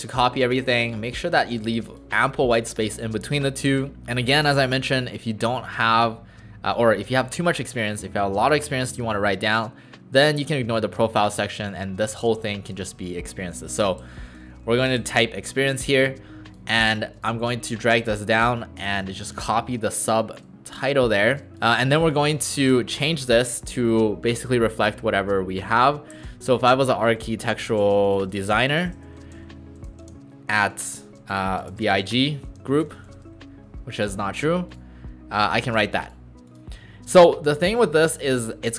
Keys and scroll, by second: 12.8 ctrl+a, 14.4 typing, 22.6 ctrl+a, 24.8 shift+a, 25.8-33.2 typing.